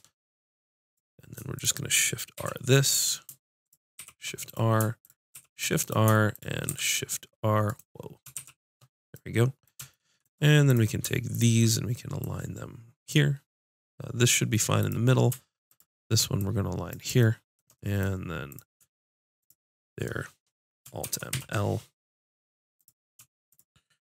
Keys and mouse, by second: 0.8-3.0 drag, 2.3 shift+r, 3.9 shift+r, 5.3 shift+r, 6.6 r, 8.3 shift+r, 10.6-11.6 drag, 11.8-13.9 drag, 14.7-18.0 drag, 18.4-21.0 drag, 21.0 alt+m, 22.7-24.1 drag.